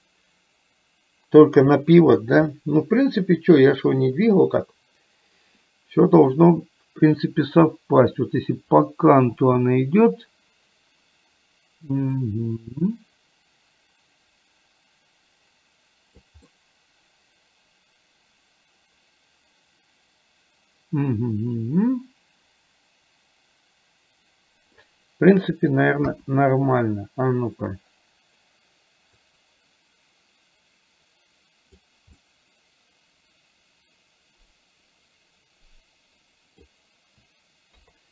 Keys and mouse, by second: 12.3 click, 12.8-16.3 drag, 16.6-24.8 middle drag, 26.1 KP_1, 29.3 click, 30.8-31.8 drag, 32.3-36.8 middle drag, 37.9 KP_3.